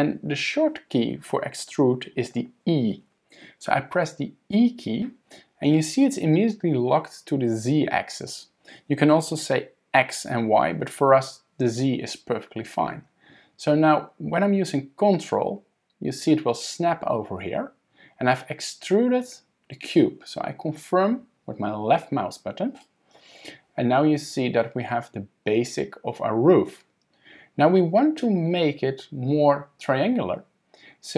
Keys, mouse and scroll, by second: 4.5 e.